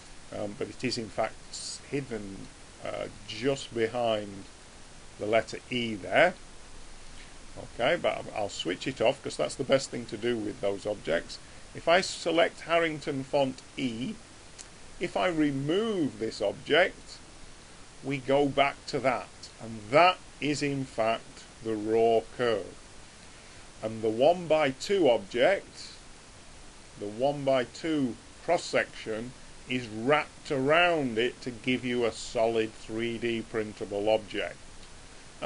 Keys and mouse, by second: 1.2-2.2 middle drag, 2.6 middle click, 4.8 middle click, 6.0 middle click, 6.8-8.3 middle drag, 8.3-12.2 drag, 12.8-14.5 middle drag, 16.9 click, 17.7-25.5 middle drag, 25.5 click, 31.0 middle click, 32.0 middle click, 32.4 middle click, 34.2-35.4 middle drag.